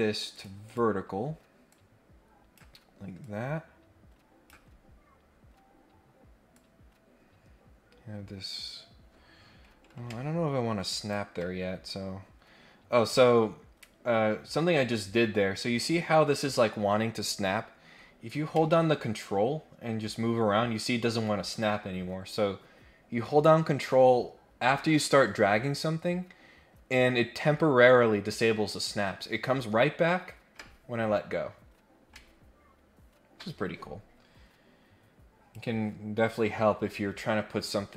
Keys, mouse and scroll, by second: 0.3 click, 0.6 click, 1.6 click, 3.2-4.5 drag, 4.7 scroll up 1, 4.9-5.5 scroll down 2, 5.5 scroll up 1, 6.5-11.1 drag, 13.2-35.5 drag.